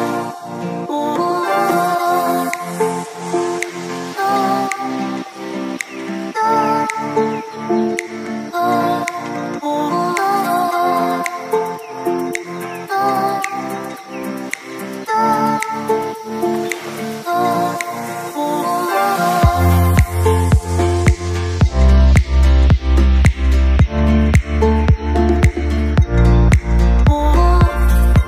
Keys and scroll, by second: 6.1 ctrl+z, 10.6 ctrl+z, 16.0 ctrl+z, 16.2 ctrl+z.